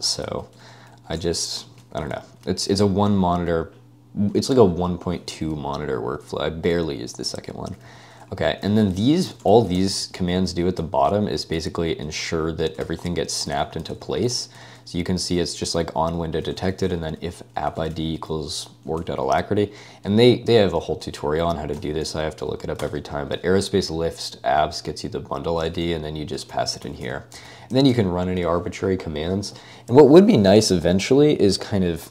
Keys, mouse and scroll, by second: 1.1 Escape, 1.2 shift+4, 1.6 Escape, 1.8 0, 2.2 ctrl+d, 6.7-10.0 typing, 10.0 ctrl+d, 10.2 ctrl+d, 10.8 ctrl+d, 10.8 ctrl+u, 11.6 ctrl+d, 12.4 Escape, 12.8-18.4 typing, 13.1 Escape, 14.6 ctrl+u, 14.9 ctrl+u, 19.1 Escape, 20.1 ctrl+space, 20.8 3, 21.7 ctrl+u, 22.0 ctrl+l, 22.0 ctrl+p, 22.8 Return, 25.7 ctrl+space, 25.8-28.9 typing.